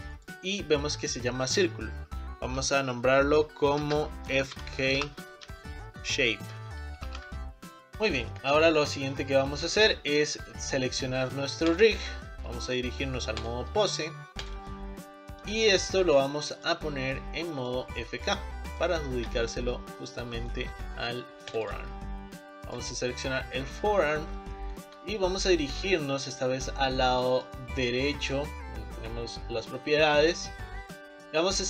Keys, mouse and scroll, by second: 7.3 Down, 7.3-11.8 drag, 7.9 middle click, 8.4 middle click, 13.4 click, 14.5-15.6 drag, 16.1 click, 17.7 click, 18.7 click, 18.9 click, 19.4 scroll up 4, 19.9-21.5 middle drag, 21.5 click, 22.7 click, 23.6-27.4 middle drag, 27.4-31.6 drag.